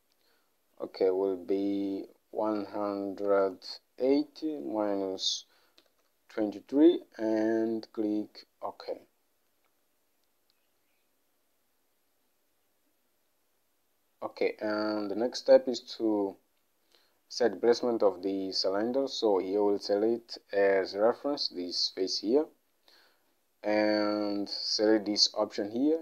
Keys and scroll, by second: 3.4-6.4 typing.